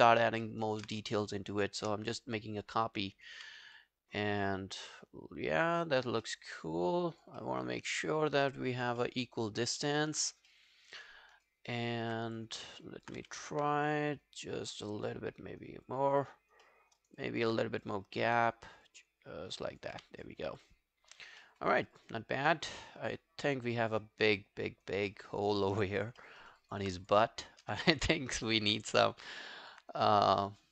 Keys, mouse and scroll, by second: 0.1 alt+click, 0.5 alt+middle click, 0.7 alt+right click, 1.4 shift+click, 3.8 alt+click, 4.7 alt+click, 6.3 alt+middle click, 6.6 alt+right click, 6.8 alt+click, 7.4 alt+middle click, 7.7 alt+right click, 8.0 alt+middle click, 8.2 alt+right click, 8.5 alt+middle click, 9.0 alt+middle click, 9.3 alt+right click, 9.6 alt+click, 10.5 alt+middle click, 10.8 alt+right click, 11.1 alt+middle click, 11.4 alt+right click, 11.7 alt+click, 12.6 alt+click, 13.2 w, 16.7 alt+middle click, 17.0 alt+right click, 17.2 alt+click, 18.1 alt+click, 20.4 q, 20.5 alt+scroll down 3, 20.7 alt+click, 21.4 alt+middle click, 21.8 alt+scroll down 3, 22.0 alt+click, 25.1 alt+middle click, 25.3 alt+right click, 25.5 alt+click, 26.2 alt+middle click, 26.4 alt+right click, 26.6 alt+click, 27.5 shift+right click, 28.7 w, 29.1 alt+middle click, 29.3 alt+right click, 29.6 alt+click, 30.0 right click.